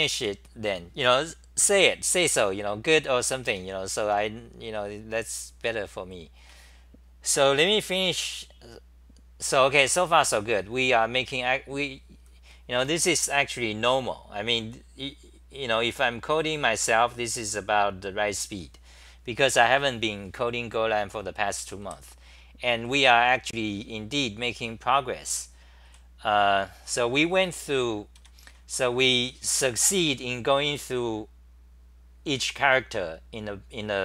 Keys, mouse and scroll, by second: 0.0-0.7 typing, 3.2 t, 3.4 t, 4.0 t, 6.4 c, 9.8 c, 10.0 c, 21.6 d, 25.1-25.8 typing, 25.3 scroll up 10, 27.6-29.8 typing.